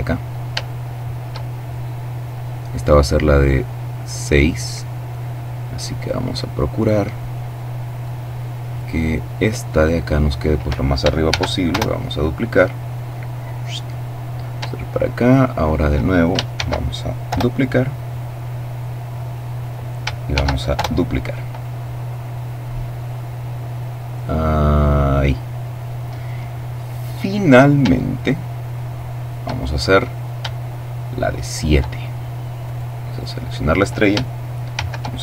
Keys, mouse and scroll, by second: 0.0 shift+middle click, 0.9-1.7 shift+scroll up 1, 2.1 right click, 3.8-5.8 drag, 5.9-7.9 drag, 8.1 click, 10.6 shift+d, 11.0 shift+Return, 12.0-13.8 drag, 14.6 shift+right click, 15.9 d, 16.6 Return, 17.4-19.4 drag, 19.7 shift+d, 20.1 shift+Return, 21.0-25.0 drag, 27.4-28.9 shift+middle drag, 28.9-29.9 shift+scroll up 4, 29.9-31.5 shift+middle drag, 31.9 right click, 34.0 shift+d, 34.8 Return.